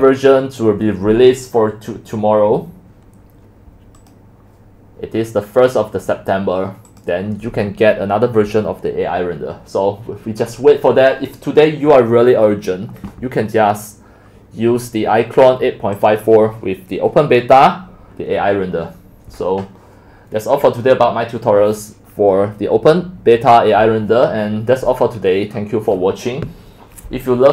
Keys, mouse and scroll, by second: 4.1 click, 6.9-12.1 drag, 14.2-14.9 scroll down 1, 14.9-15.9 scroll up 1, 15.9-16.3 scroll up 1, 16.3-21.3 drag, 21.6-21.9 scroll down 5, 21.9-22.9 scroll up 3, 22.9-24.6 middle drag, 22.9-24.2 scroll down 4, 24.2-24.6 scroll up 7, 24.6-25.5 scroll down 8, 25.5-26.0 scroll up 10, 25.9 middle click, 26.0-26.3 scroll down 5, 26.3 middle click, 26.3 scroll up 5, 26.4-27.5 scroll down 1.